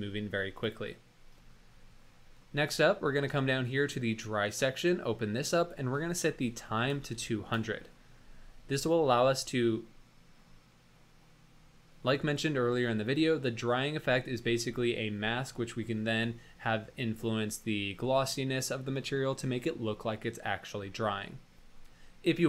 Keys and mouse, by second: 4.7 click, 5.5-7.7 drag, 7.1 KP_0.